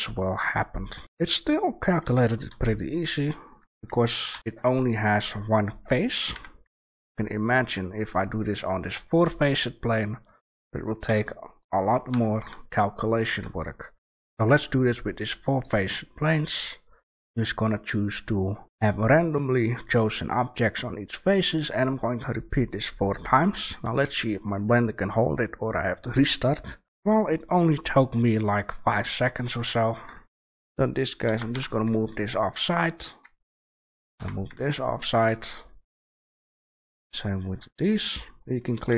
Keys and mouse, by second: 0.7-2.0 middle drag, 2.0 right click, 2.0 g, 4.7-5.1 middle drag, 5.1-7.6 right drag, 6.3 g, 9.8 right click, 11.0 g, 13.3 a, 14.1 Delete, 14.2 shift+a, 29.8-31.2 middle drag, 31.2 g, 32.6 a, 32.9-34.7 right drag, 33.8 g, 35.2 a, 35.5 right click, 36.3 g, 38.7 g.